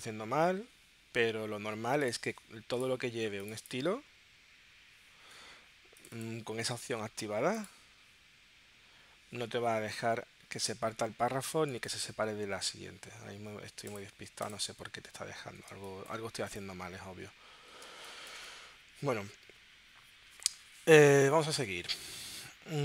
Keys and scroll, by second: 17.9 space.